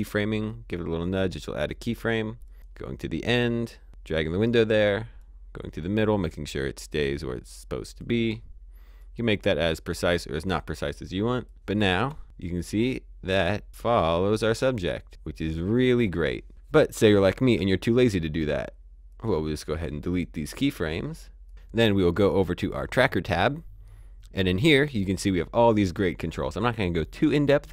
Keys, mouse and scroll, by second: 3.6 click, 7.4 click, 12.4 click, 17.9 click, 18.2 Delete, 19.0 click, 20.0 click, 21.4 click, 22.6 click.